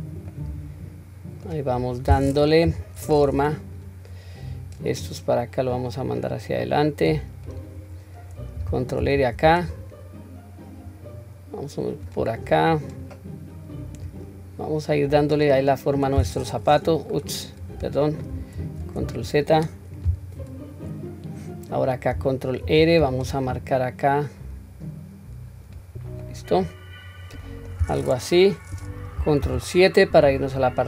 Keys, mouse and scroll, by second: 0.3-1.5 middle drag, 2.7 KP_3, 4.5 click, 5.7 click, 5.9-7.6 drag, 12.7 click, 14.0-16.0 drag, 16.2 click, 17.2 right click, 18.6 ctrl+z, 22.6 ctrl+r, 26.2-27.7 middle drag, 29.4 ctrl+KP_7.